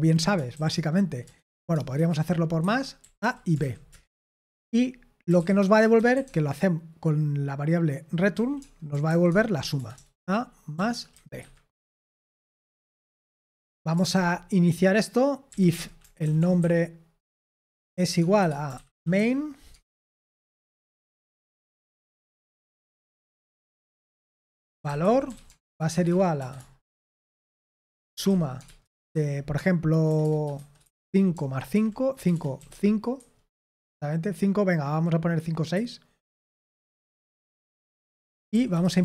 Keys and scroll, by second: 0.0-6.6 typing, 2.5 Escape, 4.5 Tab, 8.3-11.1 typing, 11.3 Escape, 12.7 typing, 13.4 Return, 13.9 BackSpace, 15.3-22.8 typing, 17.1 Tab, 24.4-33.2 typing, 33.5 Escape, 35.7 6, 36.4 Escape, 37.0-39.0 typing.